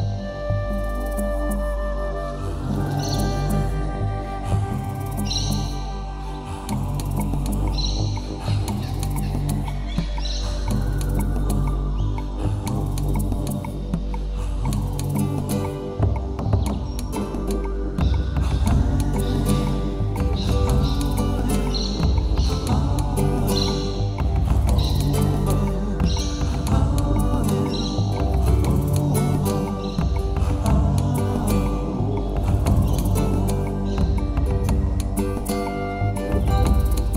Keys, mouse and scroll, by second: 0.3 ctrl+z, 1.8 ctrl+shift+z, 3.1 i, 7.6 middle click, 8.4 click, 11.4 click, 11.9 Tab, 12.1 middle click, 13.4 scroll up 5, 15.1 middle click, 17.2 click, 17.6 middle click, 18.2 scroll down 4, 18.4 middle click, 21.7 Tab, 22.1 middle click, 23.1-24.2 scroll up 9, 23.3 middle click, 23.9 shift+middle click, 24.6 click, 24.9 click, 25.2 click, 25.4 middle click, 25.8 shift+middle click, 26.1 middle click, 26.4 scroll down 3, 27.1 KP_7, 27.3-27.7 scroll down 7, 27.8 shift+middle click, 28.3 shift+middle click, 28.4 scroll up 9, 28.9 shift+middle click, 29.2 scroll down 1, 30.1 click, 30.5 click, 30.6 click, 31.0 click, 31.2-31.7 scroll down 10, 31.8 middle click, 35.6 shift+middle click, 36.3 middle click, 36.7 shift+middle click.